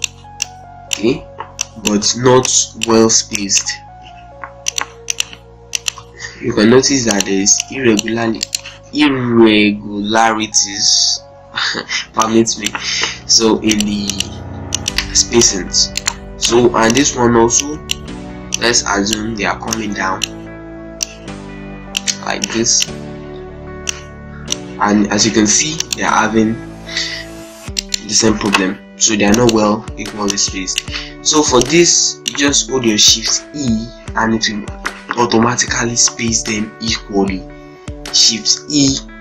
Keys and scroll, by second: 5.8 shift+e, 8.0 shift+z, 8.6 ctrl+space, 9.1 z, 11.4 ctrl+space, 11.6 ctrl+z, 13.0 ctrl+space, 22.9 c, 25.8 F4, 27.4 z, 27.9 ctrl+space, 29.6 z, 31.0 ctrl+space, 33.0 shift+e, 38.3 shift+e.